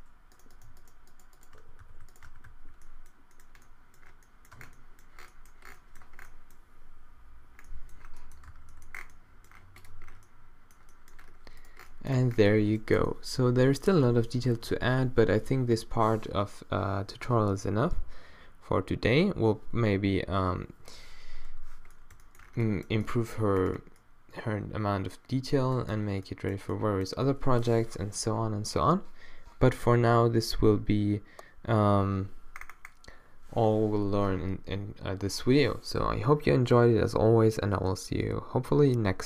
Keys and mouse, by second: 1.9 q, 2.3 q, 2.5 q, 4.6 Tab, 8.5 a, 11.6 middle click, 12.2 a, 25.2 middle click, 26.1 middle click, 32.6 middle click.